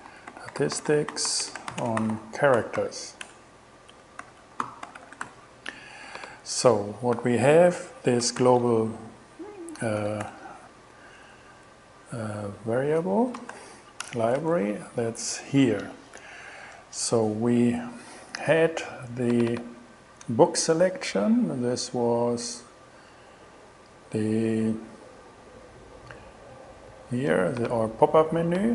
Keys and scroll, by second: 0.0-5.8 typing, 7.2 shift+4, 8.4 shift+m, 9.8-10.8 typing, 13.6 shift+l, 14.1 shift+Return.